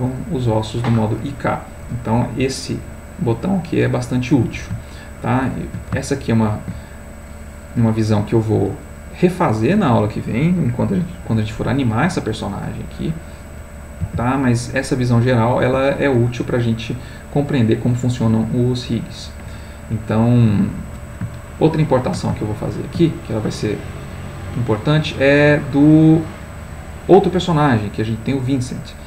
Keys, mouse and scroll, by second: 5.0 ctrl+middle click, 6.1-12.5 ctrl+shift+middle drag, 13.2 click, 14.2 r, 15.7 Escape, 17.0 middle click, 18.0-19.0 middle drag, 20.5 middle click, 21.5 ctrl+middle click, 22.9-24.4 shift+middle drag.